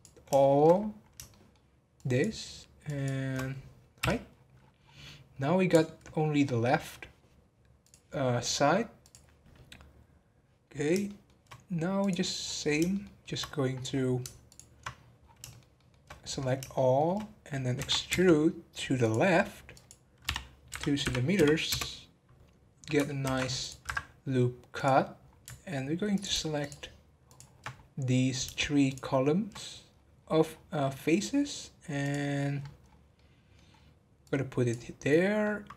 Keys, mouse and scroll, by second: 0.4 shift+middle click, 0.7 scroll up 3, 1.3 shift+middle click, 1.9 shift+click, 2.8 shift+click, 4.0 h, 4.3-4.6 scroll down 10, 5.0-6.4 middle drag, 6.4-6.8 scroll up 9, 7.8-11.0 drag, 11.0 shift+middle click, 12.0 click, 12.4 scroll down 4, 12.9 shift+middle click, 13.4-14.4 scroll up 12, 14.4 ctrl+click, 14.9-15.4 scroll down 11, 15.4 shift+middle click, 16.1-16.4 scroll up 8, 16.7 shift+middle click, 17.2 scroll down 2, 17.7 e, 19.7-22.6 drag, 22.6 scroll up 2, 24.7 click, 25.2 scroll up 1, 26.1 alt+click, 26.6 alt+shift+click, 27.2 alt+shift+click, 27.7 scroll up 3, 28.8 shift+click, 29.9-32.0 scroll down 14, 32.0 click, 32.5-33.1 scroll up 8, 33.1 middle click, 33.7-34.2 scroll up 1, 34.2 click, 35.0-35.4 scroll down 2, 35.4-35.7 middle drag.